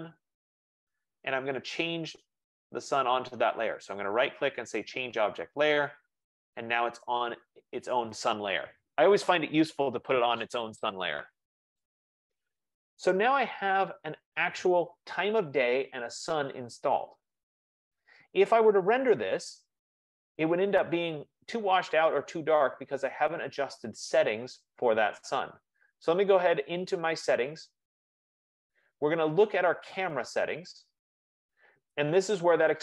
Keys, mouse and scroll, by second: 0.0-0.3 typing, 2.6 click, 3.8 right click, 5.7 click, 7.8 click, 12.8 click, 20.3-25.3 drag, 27.6 click, 30.1 click.